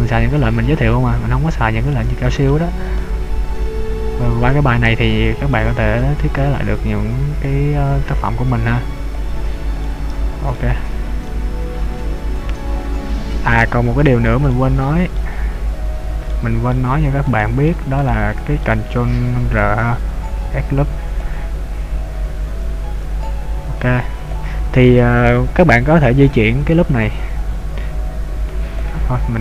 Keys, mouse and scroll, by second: 0.7-1.1 scroll up 2, 2.1 middle click, 3.0 right click, 3.6 click, 5.8 right click, 6.7 click, 8.6 click, 10.0 middle click, 11.0-11.4 scroll down 1, 11.4 middle click, 14.5 shift+middle click, 16.4 shift+middle click, 17.5 shift+middle click, 18.1 shift+middle click, 19.9 ctrl+r, 21.2 click, 22.7 ctrl+r, 24.3 click, 27.5 click.